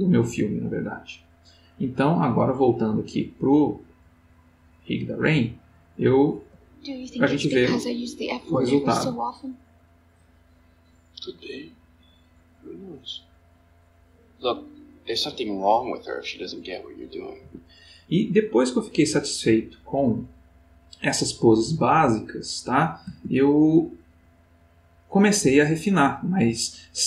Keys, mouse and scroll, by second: 1.3 click, 2.6 click, 4.5-6.1 drag, 6.3 space, 17.4 Escape.